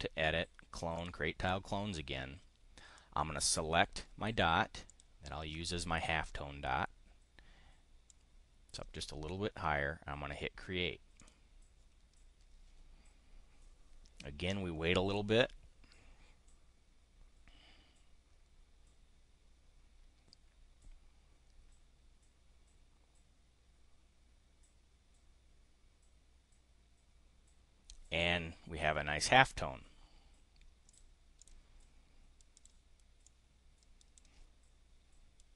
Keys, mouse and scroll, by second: 1.0 click, 2.9 click, 4.9 click, 8.1 click, 11.2 click, 30.8 click, 31.2 click, 32.5 click, 33.2-34.2 drag.